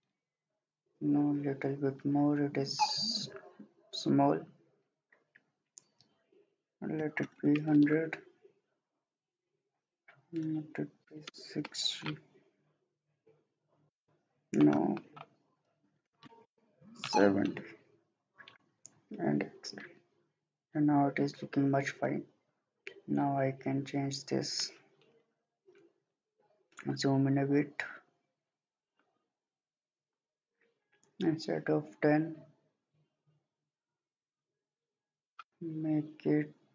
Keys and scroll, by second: 6.8-7.5 typing, 7.7 Return, 10.9-11.6 typing, 11.7 Return, 15.8-16.5 typing.